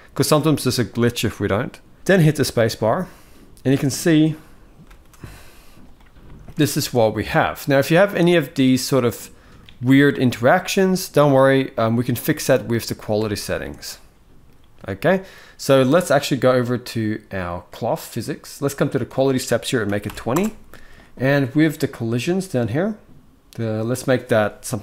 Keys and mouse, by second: 2.0 space, 4.6 space, 5.7-6.1 middle drag, 6.4-9.3 shift+middle drag, 9.8 middle drag, 10.3 space, 12.9 space, 13.4-14.1 middle drag, 14.6 shift+middle click, 17.5 click, 18.8-20.1 drag, 23.7-24.8 drag.